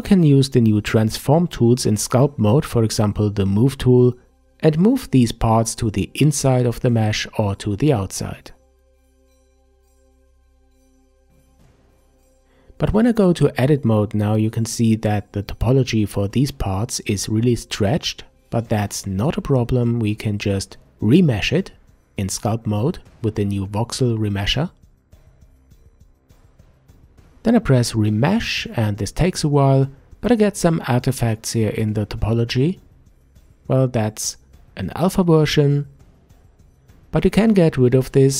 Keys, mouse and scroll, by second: 0.2-3.2 scroll up 1, 3.4 click, 4.7-7.8 drag, 9.0-11.1 middle drag, 11.8 alt+m, 16.9 Tab, 17.3-18.9 scroll up 4, 18.9-20.5 scroll down 4, 20.5 Tab, 23.4-26.4 drag, 29.8-32.8 middle drag, 33.7 ctrl+z, 37.2 Tab.